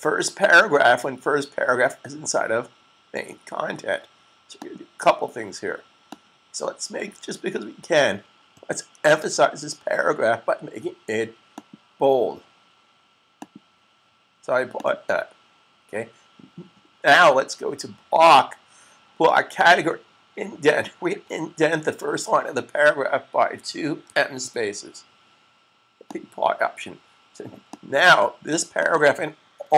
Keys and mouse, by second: 4.6 click, 11.5 click, 18.1 click, 20.5 click, 23.4-24.7 typing, 26.1 click.